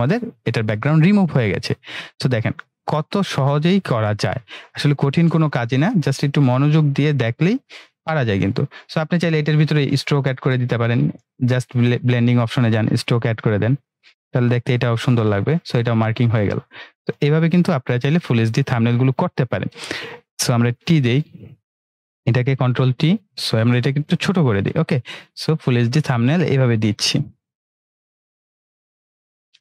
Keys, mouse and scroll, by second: 2.3-4.6 drag, 10.3 right click, 11.6-15.2 drag, 20.6 ctrl+r, 21.6 click, 22.6 ctrl+t, 24.0-25.0 drag.